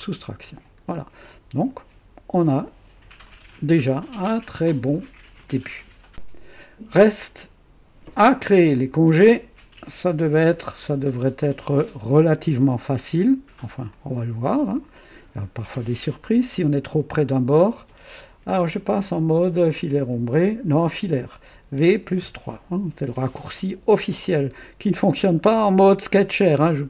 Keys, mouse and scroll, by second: 0.9 click, 2.3 KP_2, 3.2-5.4 drag, 8.7 click, 10.0 KP_2, 11.0 scroll up 1, 12.5 KP_0, 13.8-15.4 drag, 21.7 v, 24.1-25.1 drag, 25.4-26.8 right drag.